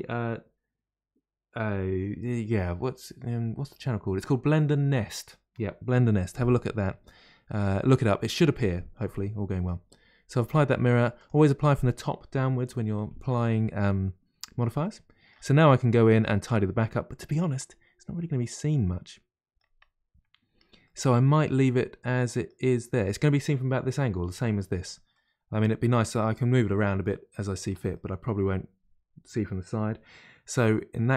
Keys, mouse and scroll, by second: 7.6 click, 10.4 click, 11.1 click, 14.8-15.5 middle drag, 15.5-15.9 scroll up 1, 15.9-19.5 middle drag, 20.5-20.8 scroll down 1, 20.8-23.9 middle drag, 25.1-31.1 middle drag.